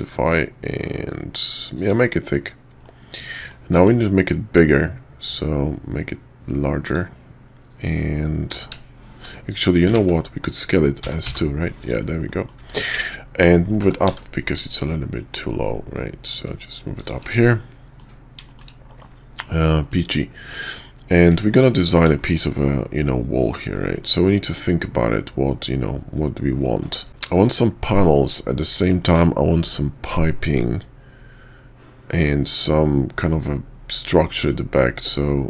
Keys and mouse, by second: 2.8-3.5 middle drag, 3.8 s, 8.5 s, 10.2 ctrl+z, 10.9 s, 12.2 middle drag, 12.6 `, 13.8 g, 17.6-18.0 drag, 18.4 shift+drag, 18.9 middle click, 19.5 middle drag, 19.8 KP_5, 20.5 middle click, 21.6 KP_5, 22.2 shift+click, 22.6 click, 23.6 KP_5, 24.0 click, 24.6-26.6 middle drag, 27.1 middle click, 28.1 middle click, 30.6-35.4 middle drag.